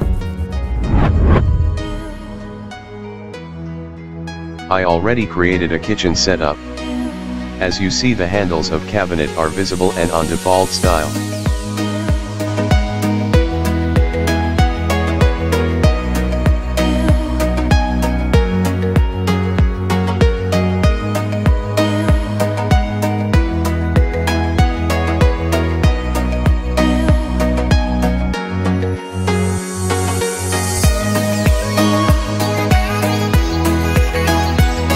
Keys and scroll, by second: 0.0 space, 0.9 d, 1.6 a, 3.2 c, 3.8 w, 5.1-8.7 typing, 9.1 Escape, 9.7 Escape, 13.3 Escape, 19.8 Escape, 22.3 Escape, 32.6 Escape, 33.3 m.